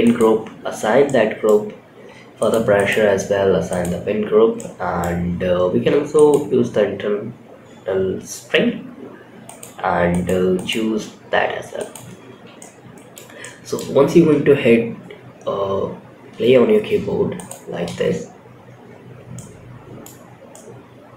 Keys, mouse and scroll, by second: 0.4 middle click, 1.7 click, 2.1-3.6 drag, 3.9 middle click, 6.0 click, 8.8-11.8 drag, 11.9-12.5 middle drag, 12.7-13.1 middle drag, 13.7 space, 15.8 space, 16.7 click, 17.2 space, 18.8-19.3 scroll down 1, 19.3-21.1 middle drag, 19.3-19.9 scroll down 1.